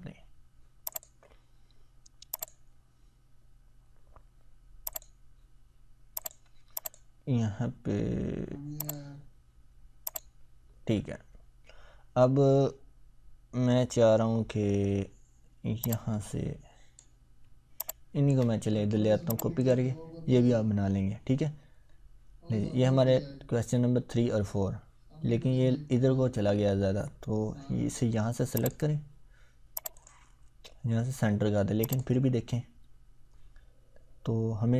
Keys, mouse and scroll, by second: 4.9 click, 15.8-17.1 drag, 17.8-18.4 ctrl+drag, 21.4 scroll down 1, 23.6 scroll up 1, 28.5 click.